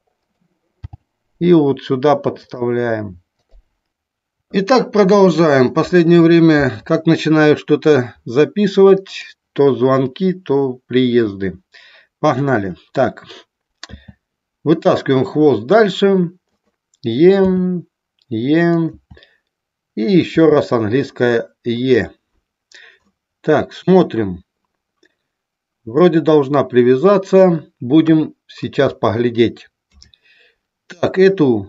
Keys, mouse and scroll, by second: 0.4 click, 0.9 g, 2.5 click, 9.0 click, 16.4 click, 18.8 click, 18.9 e, 20.0 click, 21.6 click, 21.6 e, 23.0 middle click, 26.0-27.5 middle drag, 27.9 KP_1.